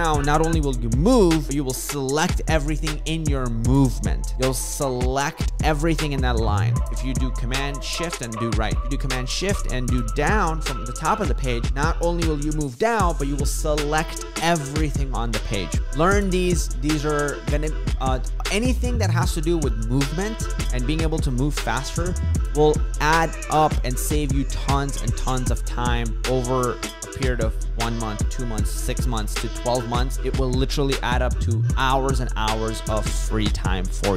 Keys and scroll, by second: 1.1 ctrl+shift+super+Right.